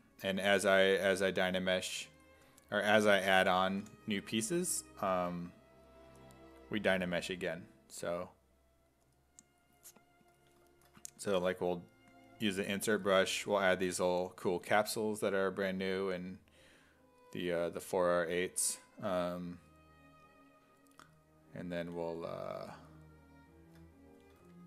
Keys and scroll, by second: 3.4 b, 3.8 p, 11.4 s, 14.0 e, 24.4 w.